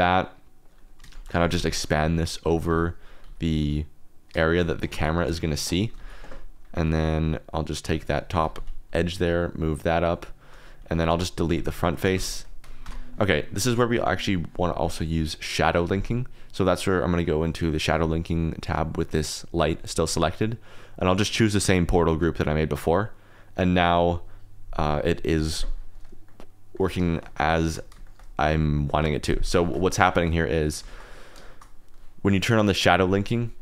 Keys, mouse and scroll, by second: 0.6 click, 1.1 shift+click, 1.3-3.2 typing, 4.4 shift+click, 5.1 KP_0, 5.9 alt+z, 7.4 click, 7.8 2, 8.0 click, 8.3 g, 8.5 z, 10.3 shift+click, 11.1 alt+z, 11.4 3, 11.9 x, 12.4 click, 12.6 KP_0, 12.6 KP_Decimal, 12.8 Tab, 13.3 click, 14.1 click, 21.0-22.9 drag, 23.6 click, 26.2-26.7 middle drag, 27.1 shift+middle click, 28.0 shift+middle click, 28.7 middle click, 29.6 shift+middle drag, 30.1 shift+middle click, 30.8 shift+middle click, 31.4-33.3 shift+middle drag, 33.3 click.